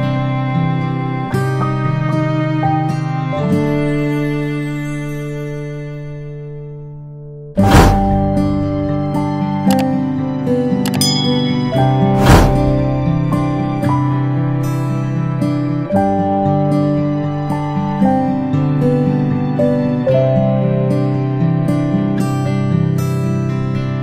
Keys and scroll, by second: 4.0 ctrl+a, 13.2 a, 18.8 a.